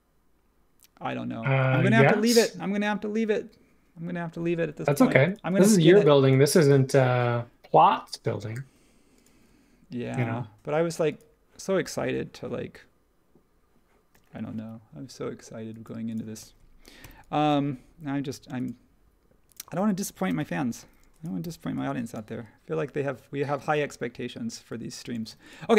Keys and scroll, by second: 17.0 h, 20.2 super+s, 21.4 h, 25.3 space.